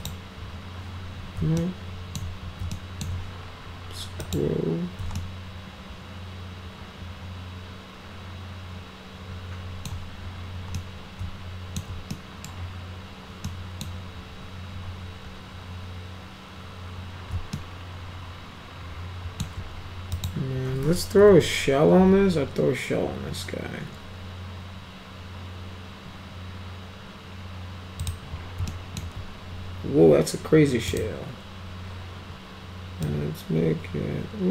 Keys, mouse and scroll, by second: 0.0 click, 1.6 alt+middle click, 2.7 alt+middle click, 4.2 click, 5.2-9.9 alt+middle drag, 10.8-11.8 middle drag, 12.1 middle click, 13.4 middle click, 17.5-19.4 alt+middle drag, 20.1 click, 21.2 s, 22.0 s, 28.0 click, 28.7 alt+middle click, 30.9 right click, 33.0-34.5 drag.